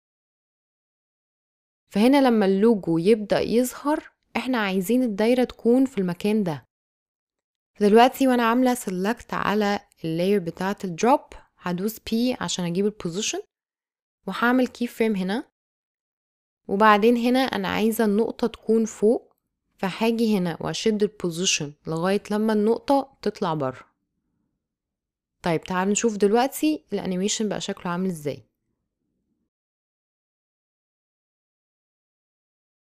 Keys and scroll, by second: 11.4 p, 29.3 space, 32.5 space.